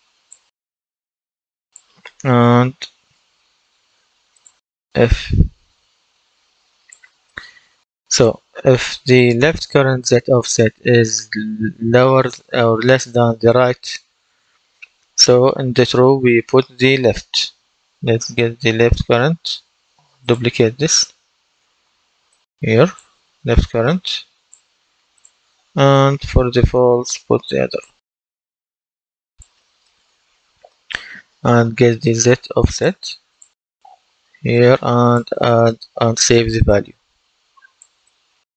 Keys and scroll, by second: 2.1-3.0 typing, 21.4 ctrl+d, 26.0 ctrl+d.